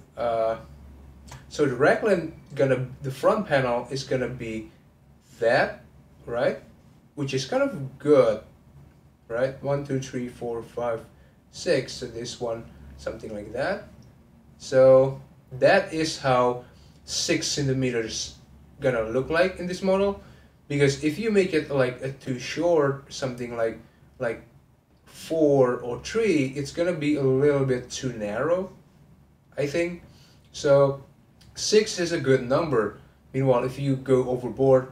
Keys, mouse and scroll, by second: 0.0-3.0 shift+middle drag, 3.1-34.9 drag.